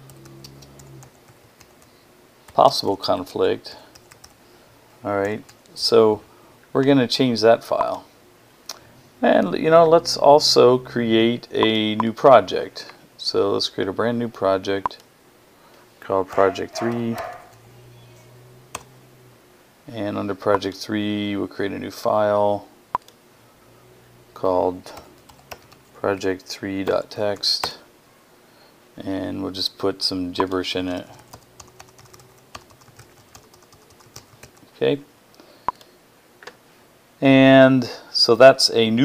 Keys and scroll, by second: 0.0-5.3 typing, 15.9-18.1 typing, 24.5-27.7 typing, 30.4-34.8 typing.